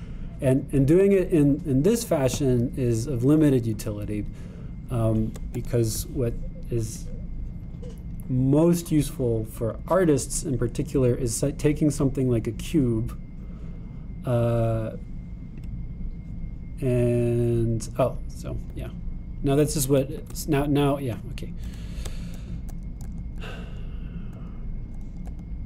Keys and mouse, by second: 7.0-22.0 super+drag, 21.2 Tab, 22.8 Tab.